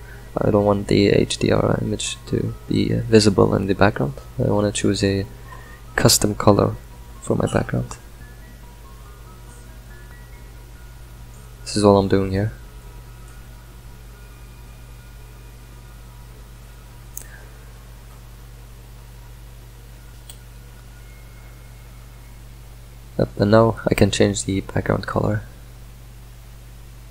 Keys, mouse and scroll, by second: 2.0 drag, 5.0-14.9 middle drag, 14.9 click, 24.7-27.1 drag.